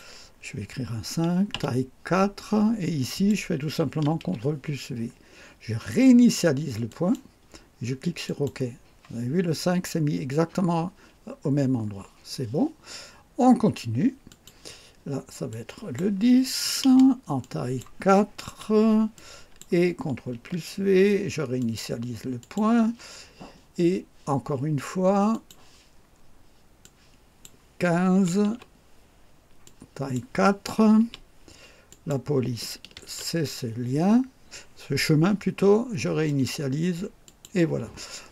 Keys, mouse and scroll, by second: 1.5 4, 3.0 click, 4.1 ctrl+v, 6.9 click, 8.2 click, 9.9 scroll up 2, 11.5 scroll down 2, 14.3 click, 15.5 click, 16.4-17.3 typing, 17.4 click, 18.4 4, 19.1 click, 20.3 ctrl+v, 21.6 click, 22.4 click, 25.3 click, 26.8 click, 28.1 KP_1, 28.4 KP_5, 29.6 click, 31.0 KP_4, 31.9 click, 32.9 ctrl+v, 36.2 click, 37.2 click.